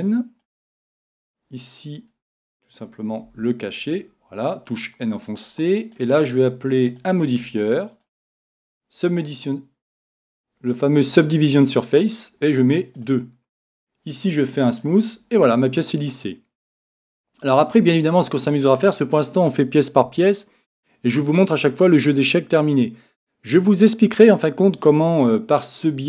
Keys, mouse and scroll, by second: 3.2 n, 5.2-9.7 drag, 13.0-16.4 drag, 15.4-19.4 middle drag, 16.7 click.